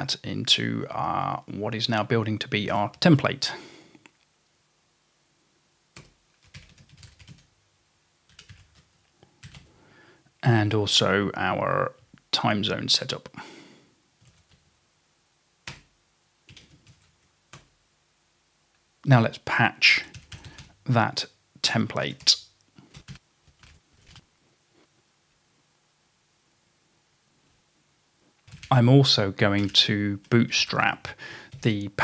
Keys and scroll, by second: 2.5-3.2 typing, 6.0 Return, 6.3-10.0 typing, 14.0-14.8 typing, 15.7 Return, 16.6-16.9 typing, 17.1 Tab, 17.6 Return, 19.0-24.7 typing, 27.5-31.6 typing.